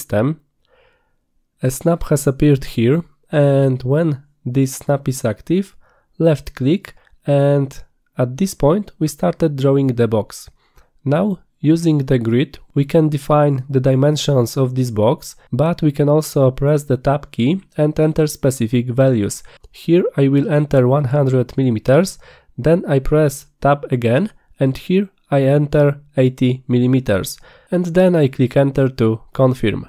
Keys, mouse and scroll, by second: 6.4 click, 19.1 Tab, 25.5 Tab.